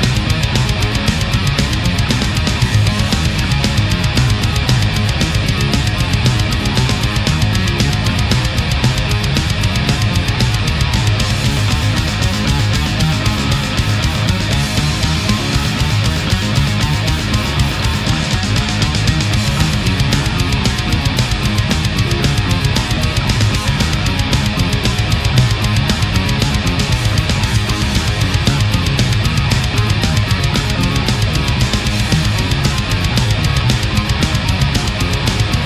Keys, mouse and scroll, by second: 2.6 right click, 3.4 shift+right click, 3.9 shift+right click, 4.2 shift+right click, 4.6 shift+right click, 5.8-7.1 drag, 7.1-7.7 middle drag, 8.3 right click, 9.4-10.6 drag, 10.6-11.4 middle drag, 11.7-14.3 drag, 14.3-19.7 middle drag, 20.2 right click, 20.9-22.8 drag, 22.9-23.7 middle drag, 23.9 middle click, 25.3 right click, 26.0-27.2 drag, 27.3-28.6 middle drag, 28.7 middle click, 29.7-30.9 middle drag, 31.7-32.8 middle drag, 34.1 click, 34.8 right click, 35.1 space.